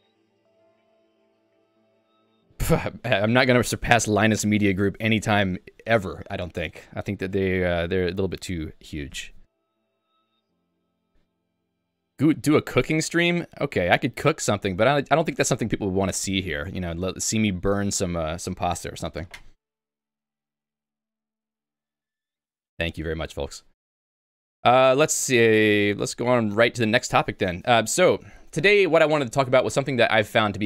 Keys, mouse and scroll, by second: 25.3 click, 26.1 ctrl+j.